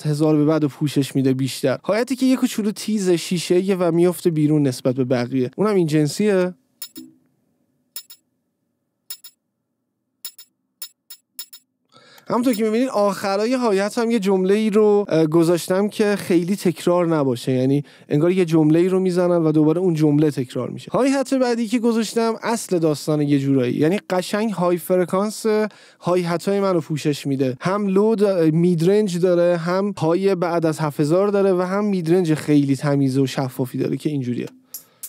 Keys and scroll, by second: 6.8 space, 12.7 space, 34.8 space.